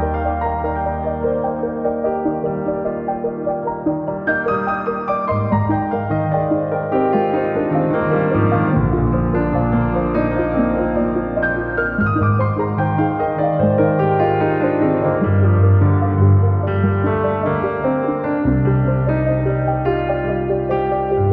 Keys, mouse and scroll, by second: 1.2 click, 5.4-7.1 middle drag, 11.9 u, 13.0-13.6 scroll up 1, 14.1 middle click, 15.9 a, 16.7 u, 18.7 Tab, 20.9 click.